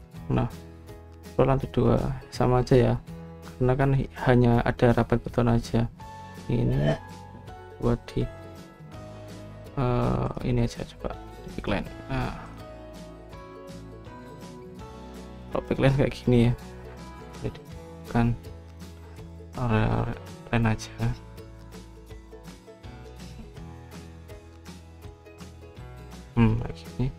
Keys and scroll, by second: 18.0 Escape, 18.1 Escape, 19.8-20.7 typing.